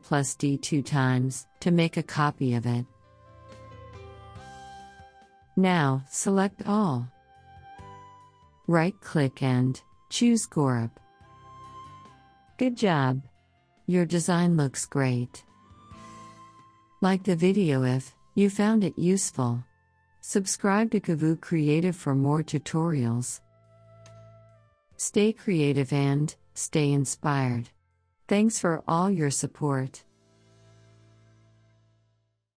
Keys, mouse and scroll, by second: 0.2 ctrl+d, 1.6 ctrl+d, 3.6-9.1 drag, 9.1 right click, 10.8 click.